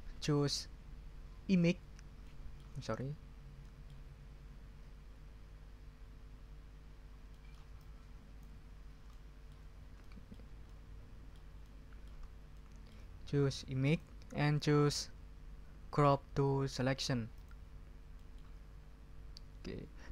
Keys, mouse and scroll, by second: 2.2 middle click, 2.4 scroll up 1, 2.4 middle click, 3.2 ctrl+scroll down 2, 3.6 ctrl+middle click, 6.9 ctrl+scroll up 2, 7.3 ctrl+middle click, 7.8 ctrl+click, 8.7 ctrl+scroll up 2, 9.7 ctrl+scroll down 2, 10.3-11.5 ctrl+scroll up 2, 12.2 ctrl+scroll down 2, 12.5 ctrl+middle click, 13.9 click, 17.3 click, 18.1 middle click.